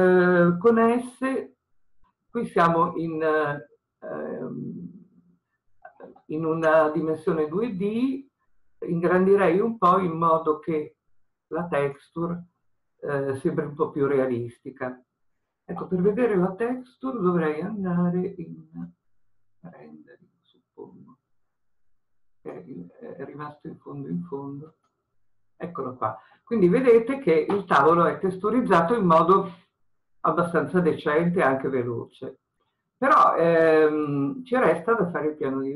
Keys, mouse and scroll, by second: 0.9 s, 19.3-25.0 drag, 26.5-29.3 scroll down 1, 34.5-35.7 drag.